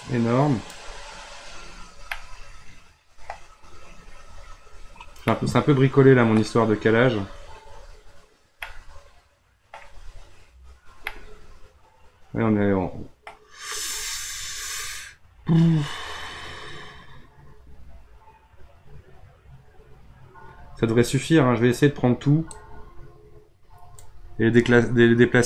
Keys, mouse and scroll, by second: 1.2-1.8 scroll down 3, 1.8 scroll up 1, 2.1-3.4 middle drag, 3.4-3.9 scroll down 3, 3.9-4.4 scroll up 5, 4.8-5.3 scroll down 1, 5.3-6.8 middle drag, 6.8-7.7 scroll up 3, 7.7-8.6 scroll up 3, 8.6-10.1 middle drag, 10.1-11.1 scroll up 1, 11.1-14.6 middle drag, 22.5-25.4 drag.